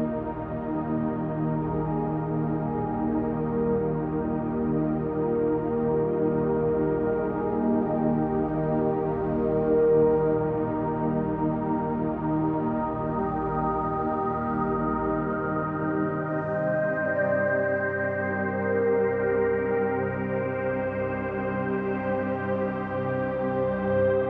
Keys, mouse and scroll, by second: 2.3-3.4 drag, 3.4-5.2 ctrl+alt+drag, 3.4 typing, 5.2-5.7 typing, 5.7-6.9 ctrl+alt+drag, 8.4-9.5 drag, 9.9-10.9 alt+drag, 11.8 typing, 12.6-17.5 drag, 18.2 click, 18.7-19.4 typing, 19.4-20.9 drag, 21.5 click, 21.9 click, 23.8-24.2 drag.